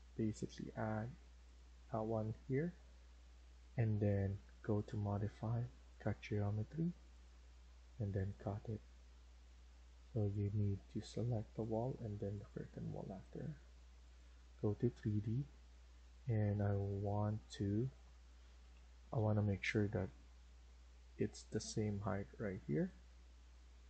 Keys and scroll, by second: 2.6 Escape, 2.9 Escape, 3.1 Escape, 14.6 Escape, 18.6 typing, 19.9 typing.